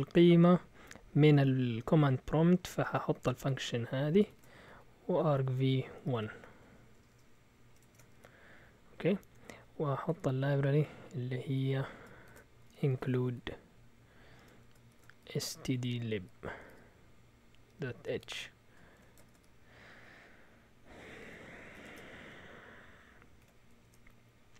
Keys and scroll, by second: 2.9-6.1 typing, 7.4-8.1 typing, 9.3 Escape, 10.0 typing, 11.5-19.8 typing, 21.0-21.7 typing, 21.8 Return, 23.4 a, 23.8 Tab.